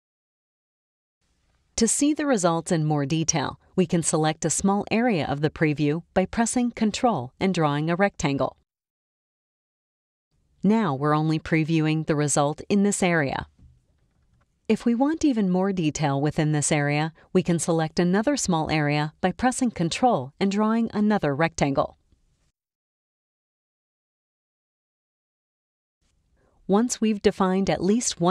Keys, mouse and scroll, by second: 7.6-10.0 ctrl+drag, 12.0 click, 13.2 click, 14.4 click, 20.1-22.2 ctrl+drag, 23.6 click, 24.6 click, 25.6 click, 26.6 click.